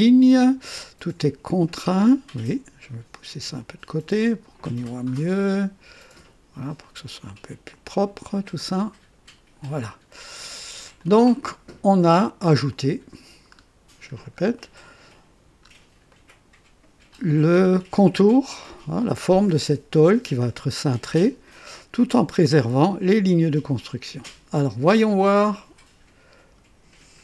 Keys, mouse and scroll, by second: 1.5-2.2 drag, 3.5-4.6 drag, 4.8 right click, 6.8-8.0 drag, 8.6-9.8 drag, 10.9 click, 12.7 click, 13.5-14.4 scroll down 4, 14.6 right click, 15.6 scroll up 1, 16.1 right click, 24.0 click, 25.3-27.2 drag.